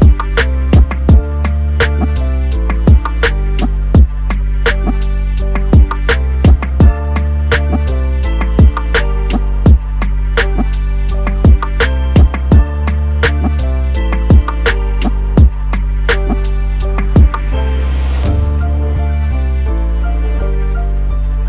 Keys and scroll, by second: 7.6 ctrl+t.